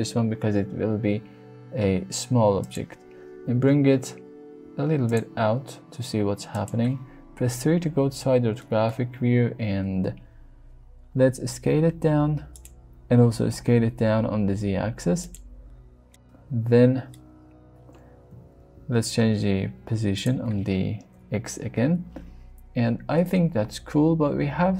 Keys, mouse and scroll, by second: 1.1 s, 2.6 click, 3.4 g, 3.6 y, 5.1 click, 5.3 s, 6.5 click, 7.3 KP_3, 8.6 shift+middle click, 9.9 s, 12.5 click, 13.0 s, 13.1 z, 15.2 click, 16.1-17.1 middle drag, 18.2 g, 18.5 x, 20.2 click, 21.1 KP_1, 22.7 shift+click, 23.0 shift+middle click, 23.7 shift+middle click, 24.2 s, 24.4 s.